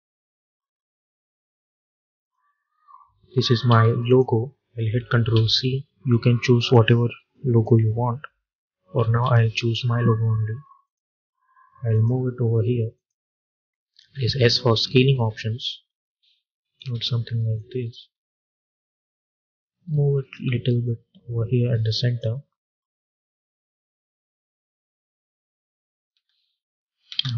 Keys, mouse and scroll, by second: 3.6 v, 4.0 click, 5.2 ctrl+c, 6.5 click, 8.9 ctrl+v, 10.7 click, 13.8 s, 14.4-19.7 drag, 19.7-20.1 alt+scroll up 1, 20.7-26.0 drag, 26.0 space.